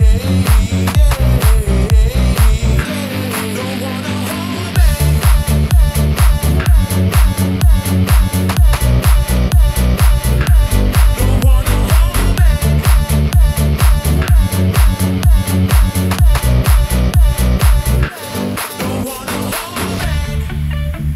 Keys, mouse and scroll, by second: 0.7 Return, 1.7 middle click, 2.9 2, 3.9 click, 4.6 alt+click, 5.9 s, 6.1 y, 10.3 Return, 11.6 alt+click, 12.8 s, 13.2 x, 14.7 Return, 15.9 alt+click, 17.7 s.